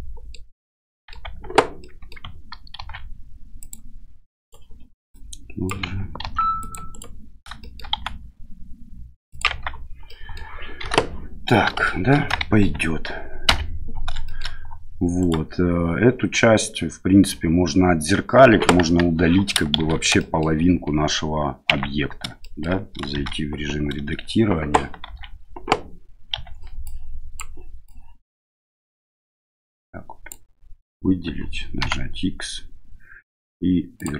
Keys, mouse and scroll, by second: 0.8 middle click, 1.2 Tab, 1.8 middle click, 2.7 ctrl+r, 5.2 click, 6.2 ctrl+r, 7.6 middle click, 7.9 s, 9.5 Tab, 10.0-10.3 middle drag, 10.8 KP_1, 11.8 shift+middle drag, 14.2 shift+middle drag, 15.2 right click, 18.8 KP_1, 19.7 shift+z, 20.1 shift+middle drag, 21.7 Tab, 22.4 shift+middle click, 23.1 shift+z, 25.0 shift+z, 26.3 1, 26.8 click, 27.9-30.3 drag, 31.8 x.